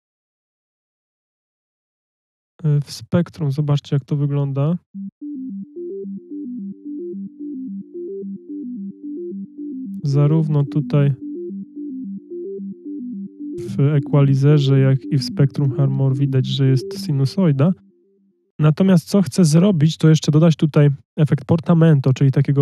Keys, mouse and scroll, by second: 16.5 F1.